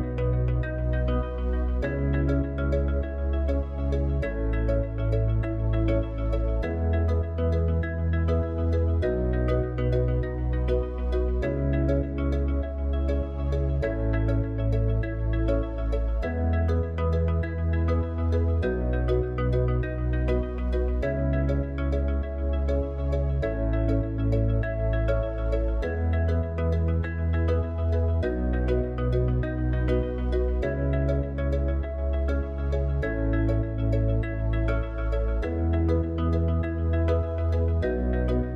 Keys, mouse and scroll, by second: 0.0 click, 4.8-11.9 drag, 25.6-38.5 drag.